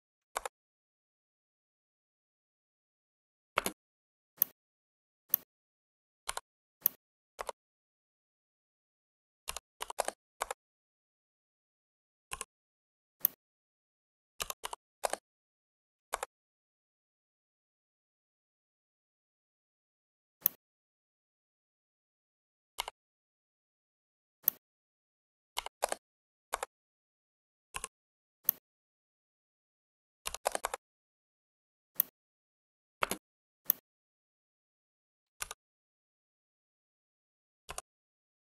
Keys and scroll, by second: 0.2 Return, 3.5 space, 9.3 2, 9.7 8, 9.8 0, 10.2 Return, 14.3 1, 14.6 8, 14.9 0, 16.0 Return, 25.5 typing, 26.4 Return, 30.1 2, 30.3 0, 30.5 Return, 32.9 space, 35.3 Delete.